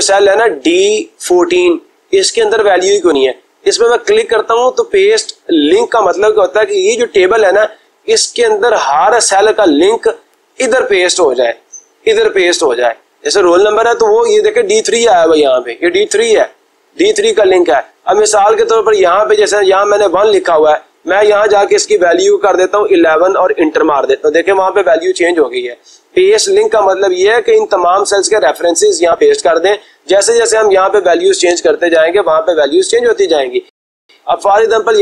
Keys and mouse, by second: 5.0 click, 8.3 click, 9.7 click, 11.1 click, 19.0 click, 20.3 click, 20.6 click, 22.2 1, 23.6 Return, 32.2 ctrl+z, 34.6 click.